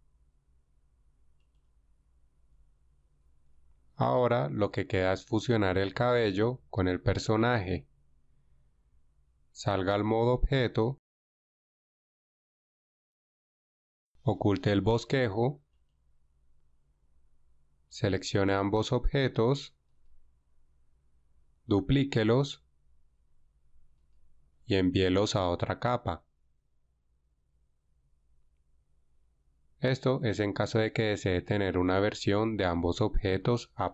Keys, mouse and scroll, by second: 10.5 Tab, 22.4 shift+d, 25.6 m.